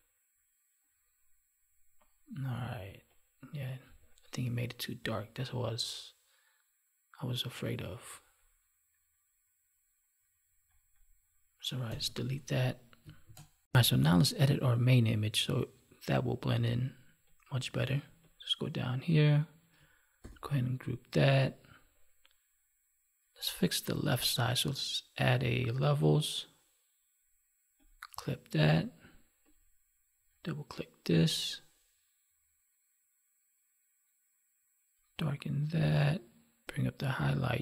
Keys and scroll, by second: 11.8 Delete, 13.2 ctrl+s, 20.1 ctrl+g.